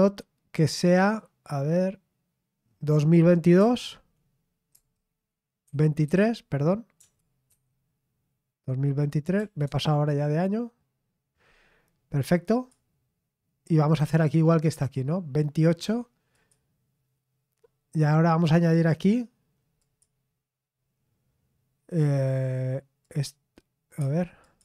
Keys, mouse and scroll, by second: 4.5-7.5 typing, 9.4 typing, 12.5 click, 13.9 click, 14.9-15.4 scroll down 2, 16.3 click, 19.8 click, 23.0 click, 24.0 Escape, 24.4 click.